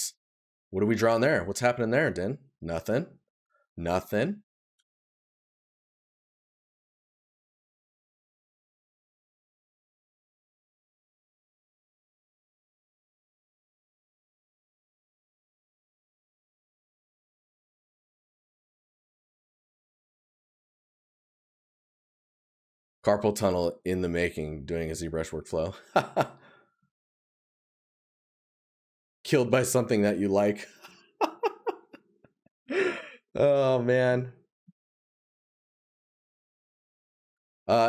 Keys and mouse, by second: 3.4 right click, 5.3 right click, 6.9 right click, 9.4 right click, 16.0 right click, 22.8 right click, 25.3 right click.